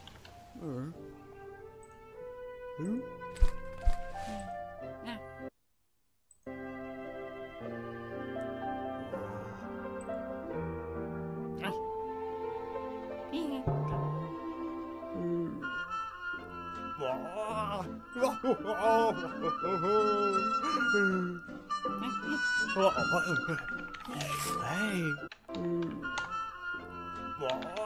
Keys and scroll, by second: 0.0-0.7 typing, 23.0-25.7 typing, 26.1 Return, 27.1-27.8 typing.